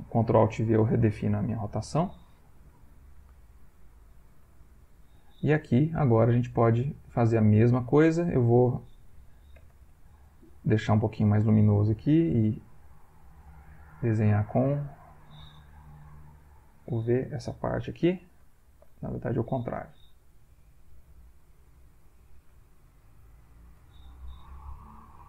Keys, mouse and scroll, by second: 0.5 ctrl+alt+click, 1.3 ctrl+click, 2.0 ctrl+click, 3.0-4.3 drag, 4.5 ctrl+click, 4.6 ctrl+middle click, 5.7-7.9 shift+drag, 9.6 l, 12.2 v, 13.3-14.8 drag, 15.8-17.0 middle drag, 18.5 ctrl+z, 20.2 v, 20.4-21.8 drag, 22.3 click, 23.3 click, 24.4 ctrl+z.